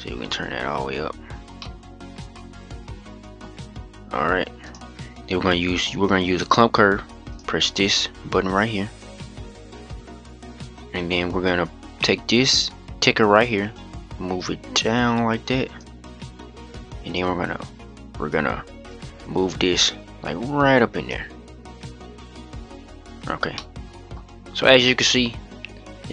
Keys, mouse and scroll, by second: 0.9-1.3 scroll down 4, 1.3-3.2 middle drag, 3.2-4.4 scroll up 3, 4.4-5.3 drag, 5.3-8.3 scroll down 1, 8.3 scroll down 1, 8.5 click, 10.3-13.5 scroll down 3, 13.5-23.0 drag, 23.0 scroll down 1, 23.3-23.9 middle drag, 23.9-24.6 scroll up 5, 24.6-26.1 middle drag.